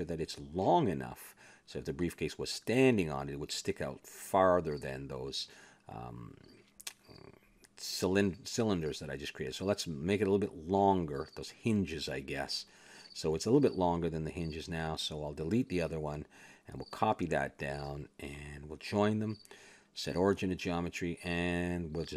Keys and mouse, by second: 0.7 click, 1.7 shift+d, 2.8 click, 4.9 KP_3, 9.0 click, 9.3 Tab, 9.7 a, 9.9 a, 10.1-11.4 drag, 10.6 s, 11.9 click, 13.3 KP_3, 15.0 a, 15.2 Tab, 16.8-18.0 drag, 17.0 x, 18.0 shift+d, 19.6 click, 20.1 ctrl+j, 21.0 click, 21.7-22.1 middle drag.